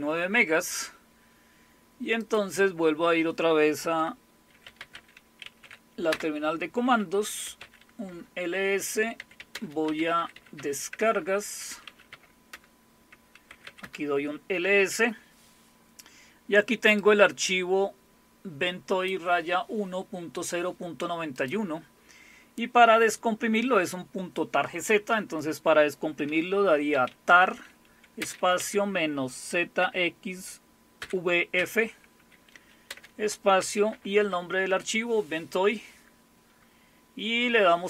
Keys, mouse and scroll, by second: 2.2 click, 4.4-6.1 typing, 7.2-15.4 typing, 8.1 Return, 17.0-19.1 drag, 21.4 click, 26.7-29.8 typing, 31.0-31.5 typing, 32.9-34.9 typing.